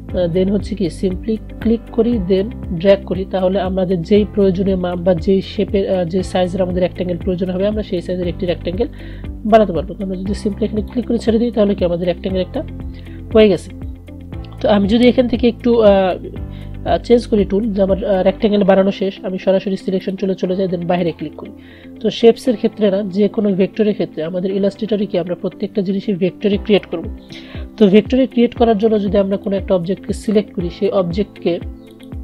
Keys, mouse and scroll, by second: 20.1 click, 29.6-32.0 drag.